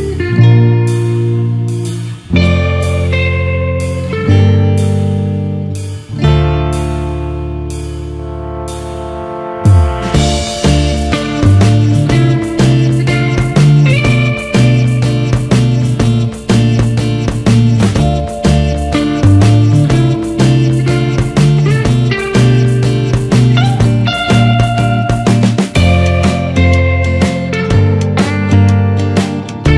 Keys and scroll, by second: 19.1 ctrl+=.